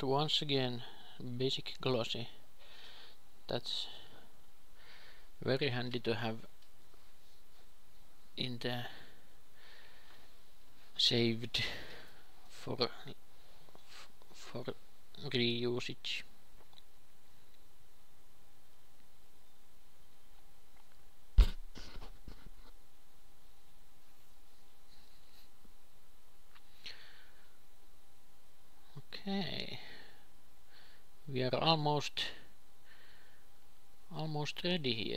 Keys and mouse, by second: 1.2 click, 1.7 alt+g, 3.4 click, 9.1-13.4 drag, 20.7-25.3 drag.